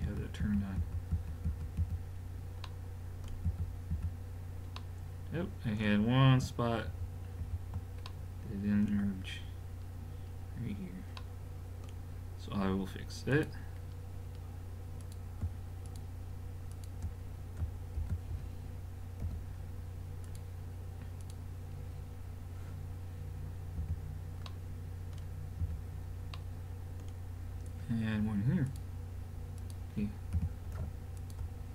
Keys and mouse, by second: 0.0-1.8 typing, 3.5 f, 3.9 f, 6.9 ctrl+z, 7.5 ctrl+z, 8.1-9.3 middle drag, 9.7 click, 9.8 middle click, 10.2 middle click, 13.3 click, 16.6-18.0 right drag, 18.0 alt+m, 19.2 a, 20.2-21.5 right drag, 21.2 click, 21.5 click, 22.9 middle click, 23.8 f, 24.5 middle click, 25.6 f, 26.4 middle click, 26.6 middle click, 28.7-31.4 drag, 30.4 g.